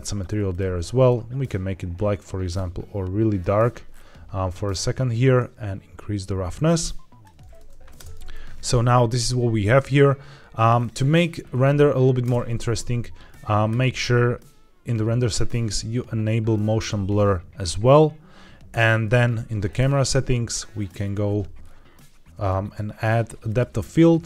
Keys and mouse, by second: 5.2-7.2 drag, 7.9 space, 12.1 space, 13.6 click, 16.7 click, 19.6 click, 20.6 click, 23.4 click.